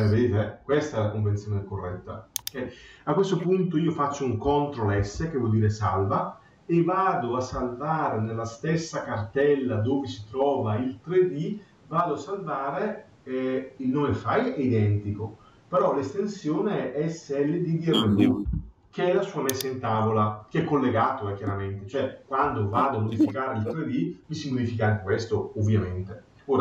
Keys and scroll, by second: 4.8 ctrl+s.